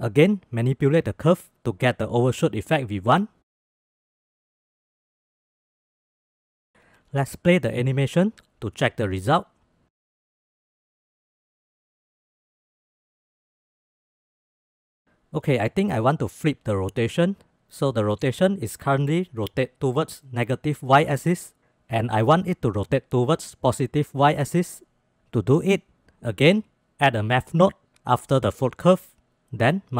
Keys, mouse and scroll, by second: 0.0-1.6 drag, 2.0 click, 2.7 click, 3.3 click, 4.5 click, 4.9 click, 5.4 click, 6.2 click, 7.3-8.0 drag, 8.0 space, 9.5 space, 10.4 click, 10.4 space, 13.1 space, 13.6-14.9 drag, 25.7 shift+a, 28.0 click, 28.5-29.8 drag.